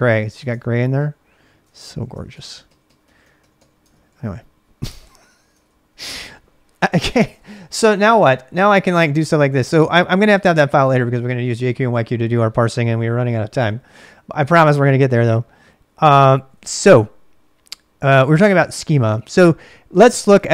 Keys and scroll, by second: 0.0-5.7 typing, 1.7 ctrl+[, 5.6 ctrl+[, 7.1-9.7 typing, 16.4 ctrl+a, 16.5 ctrl+a, 20.4 ctrl+[.